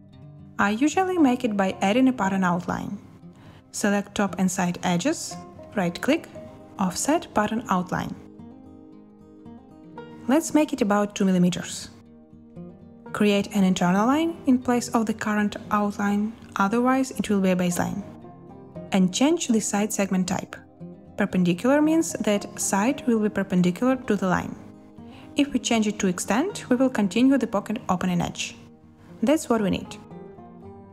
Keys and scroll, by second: 0.1 z, 0.6 z, 10.8-11.8 typing, 21.7 1, 29.7-30.6 typing.